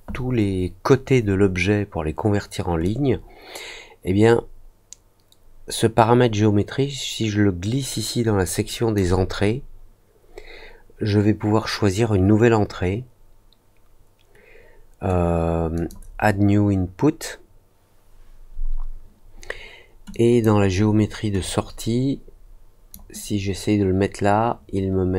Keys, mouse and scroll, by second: 2.8-8.9 drag, 15.7 click, 20.1 click, 21.4-22.9 drag.